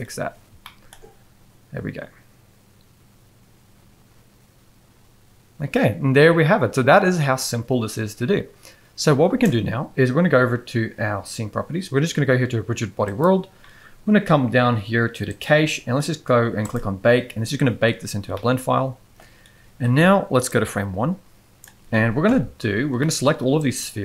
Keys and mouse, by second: 0.6-0.9 shift+middle drag, 9.2 space, 13.1 click, 15.3 click, 16.6 click, 18.3-19.1 middle drag, 20.5-21.6 drag, 22.2 KP_1, 23.0 shift+middle click, 23.7-24.0 drag.